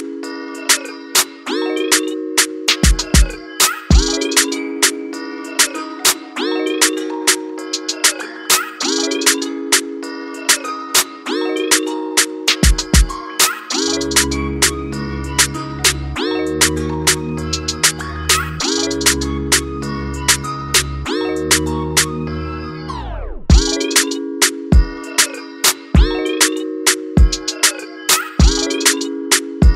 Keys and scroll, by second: 0.0-0.1 typing, 0.2 Return, 3.7-4.0 typing, 4.2 Return, 11.5 ctrl+z, 14.8 ], 14.9 ], 17.1 ], 25.0 v.